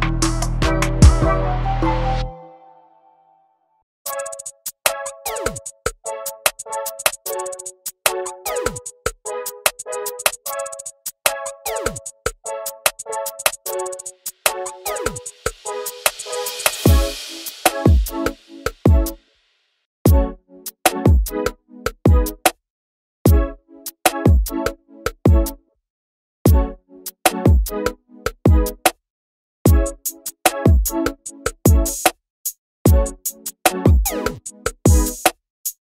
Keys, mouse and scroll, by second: 0.0-0.8 scroll down 3, 0.3 alt+a, 0.8-2.0 shift+middle drag, 2.0-2.7 scroll down 4, 2.7 scroll up 8, 3.1 scroll down 2, 3.4 shift+middle click, 3.8 scroll up 1, 4.0 click, 5.4 scroll down 1, 5.6 shift+middle click, 5.8 ctrl+right click, 6.5 click, 6.9 scroll down 2, 7.8 click, 8.6 shift+d, 9.2 click, 10.4 click, 10.8 shift+middle click, 11.3 click, 12.2 shift+middle click, 12.4 scroll up 4, 12.7-15.6 drag, 15.6 scroll down 3, 15.8 shift+middle click, 15.9 scroll up 4, 16.0 shift+middle click, 16.4-17.7 drag, 17.7 shift+middle click, 17.9 click, 21.9-22.7 scroll down 1, 22.7-23.2 scroll down 3, 30.0 z, 30.8 click, 31.3 click, 34.8 ctrl+space, 35.4 click.